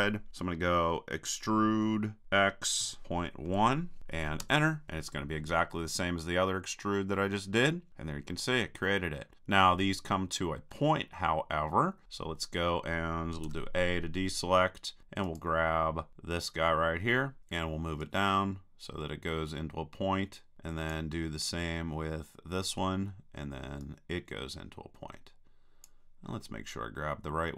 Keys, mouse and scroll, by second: 2.2 e, 6.5-8.3 middle drag, 10.2-13.0 middle drag, 13.5 a, 15.3-17.0 drag, 17.4 right click, 18.0-20.0 drag, 22.6-25.9 drag, 23.9 right click, 26.3-27.5 middle drag.